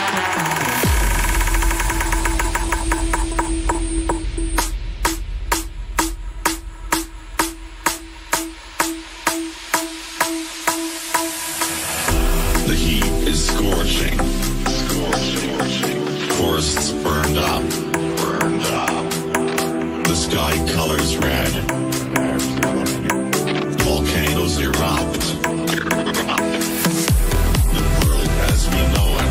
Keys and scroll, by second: 1.5 ctrl+q.